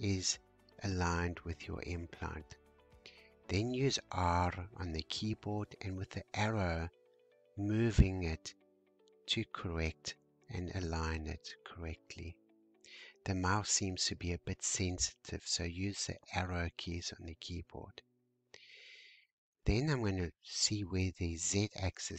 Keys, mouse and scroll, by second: 0.3-1.2 scroll up 4, 1.2-2.6 shift+middle drag, 2.6-3.1 shift+scroll down 2, 3.1 scroll up 1, 5.4 r, 13.6 g, 17.3-18.8 scroll down 4, 18.8-20.4 shift+middle drag, 20.4-22.1 scroll up 2.